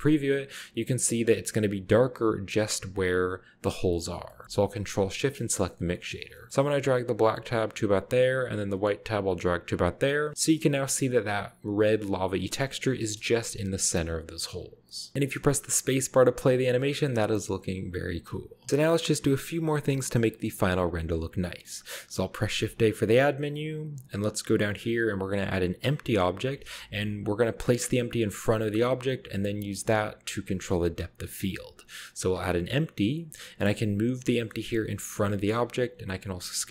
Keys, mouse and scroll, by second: 0.5-1.1 drag, 1.6-2.7 drag, 2.9-3.3 scroll down 1, 3.8-4.4 scroll down 2, 3.9-5.0 middle drag, 5.0 ctrl+shift+click, 5.4 middle click, 5.6-6.5 scroll up 1, 5.8 middle click, 6.1 middle click, 6.8-8.2 drag, 9.0-10.2 drag, 10.3-11.3 middle drag, 10.3-11.3 scroll up 1, 12.0-12.9 scroll down 1, 12.3-13.2 middle drag, 13.0 KP_0, 14.1-15.1 scroll down 1, 14.9 middle click, 21.4-22.2 middle drag, 22.4 shift+a, 31.9 click, 32.5-33.2 middle drag, 33.3 middle click, 33.8 g, 34.1 shift+click, 34.7-35.6 shift+scroll up 1, 35.0-36.7 typing.